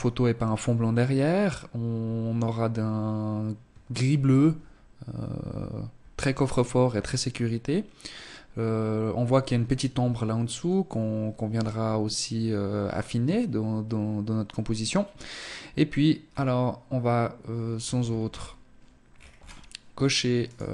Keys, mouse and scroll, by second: 15.3 scroll down 4, 16.7-18.1 scroll up 9, 18.1-18.7 scroll down 4, 19.5 right click, 20.3 right click.